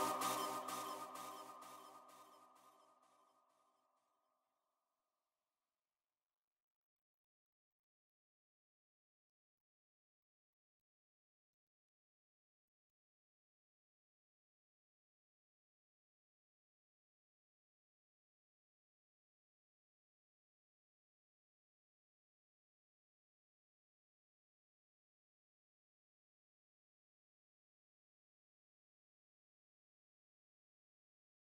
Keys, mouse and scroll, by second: 0.4 r, 1.2 g, 3.2 KP_0, 5.7 KP_7, 6.7 r, 9.7 g, 13.1 KP_0, 15.5-17.9 drag, 27.3 KP_7, 29.6 z, 30.0-30.5 scroll up 1, 30.5-31.5 shift+middle drag.